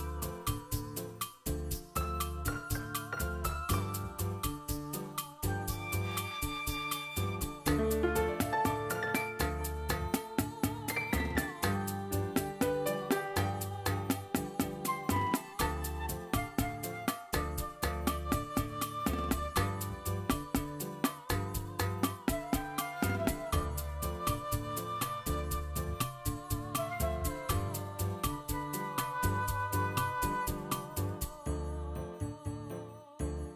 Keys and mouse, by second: 0.1 click, 0.4 v, 0.6 v, 1.1 click, 1.6 click, 1.9-7.8 typing, 2.3 click, 2.9 click, 3.5 click, 3.8 click, 4.4 click, 5.4 shift+middle click, 5.6 click, 5.9 click, 6.6 shift+middle click, 7.0 click, 7.0 alt+shift+z, 7.1 alt+shift+z, 7.2 click, 7.6 click, 8.8 ctrl+Tab, 8.9 ctrl+Tab, 9.0 middle click, 9.4 ctrl+middle click, 9.6 click, 9.7 alt+shift+z, 9.8 drag, 10.5 click, 10.9 middle click, 11.0 click, 11.3-16.4 typing, 12.0 click, 12.6 alt+shift+z, 12.8 click, 12.9 ctrl+shift+middle click, 13.4 click, 14.4-14.8 click, 14.5 click, 15.4 click, 15.7 click, 15.8 alt+shift+z, 16.4 click, 16.9 drag, 16.9 alt+shift+z, 17.0 click, 17.6 click, 17.9 d, 18.3 n, 18.6 click, 18.9 alt+shift+z, 19.0 alt+shift+z, 19.6 click, 19.8 alt+shift+z, 19.9 click, 20.0 shift+middle click, 20.1 g, 20.8 click, 21.1 click, 21.1 g, 21.3 alt+shift+z, 21.4 drag, 22.2 click, 22.4 g, 22.9 click, 23.4 space, 23.5 alt+shift+z, 24.4 space, 24.5-24.9 drag, 25.1 ctrl+middle drag, 25.2 space, 25.6 space, 25.7 drag, 26.3 alt+shift+z, 26.4 click, 26.5 ctrl+middle click, 26.6 click, 26.9 click, 26.9 space, 27.1 space, 28.2 space, 28.3 drag, 28.7 click, 29.2 click, 29.3 ctrl+middle click, 29.4 click, 29.6 alt+shift+z, 29.8 click, 29.9 click, 30.1 ctrl+middle click, 30.3 click, 30.5 shift+middle click, 30.7-32.6 typing, 31.6 drag, 32.0 alt+shift+z, 32.1 click, 32.6 shift+middle click, 32.9 drag.